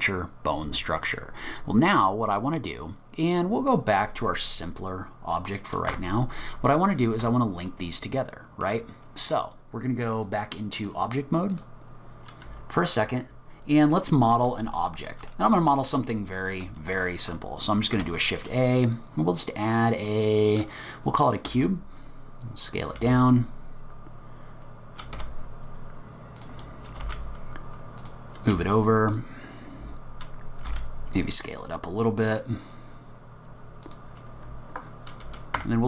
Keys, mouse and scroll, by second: 4.0 click, 4.7 scroll down 2, 4.9-5.8 scroll up 5, 5.9 Tab, 6.3 click, 6.9 click, 7.2 Tab, 7.6 click, 8.2 middle click, 10.3 click, 11.5 click, 13.9-14.6 scroll up 4, 14.8 middle click, 17.9 shift+a, 21.5 s, 23.0 g, 26.4 click, 27.0 g, 28.7-29.2 scroll up 3, 29.2 scroll down 2, 29.5-30.0 scroll up 2, 30.6 s, 32.1 middle click, 33.8 click, 35.6 Tab.